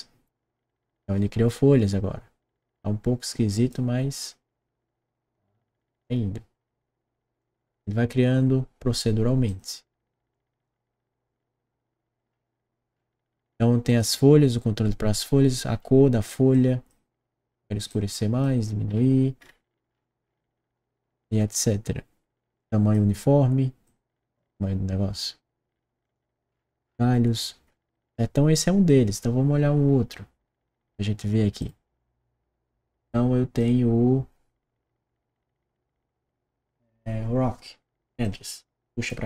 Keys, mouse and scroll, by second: 3.2 click, 5.7 click, 7.3 click, 9.4 click, 10.2 click, 12.1 middle click, 12.8 middle click, 13.8 click, 15.7 scroll up 1, 16.5-16.9 drag, 17.9-18.4 drag, 18.8 scroll up 1, 19.4-20.0 scroll up 1, 20.2-21.2 scroll down 2, 21.5 middle click, 22.5 click, 23.8 click, 25.9 click, 27.3 middle click, 31.6 click, 33.0 click, 38.2 click.